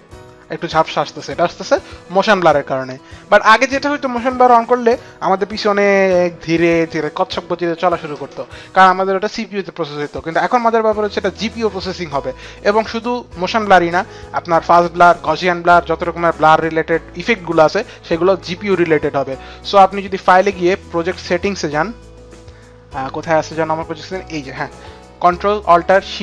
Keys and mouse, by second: 20.1 click, 24.2 click.